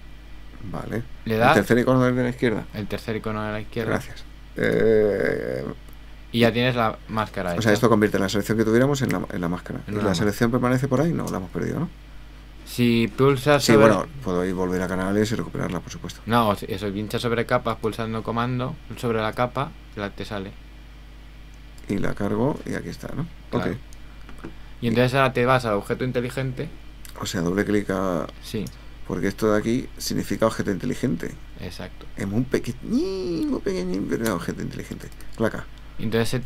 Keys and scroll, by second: 10.3 super+h.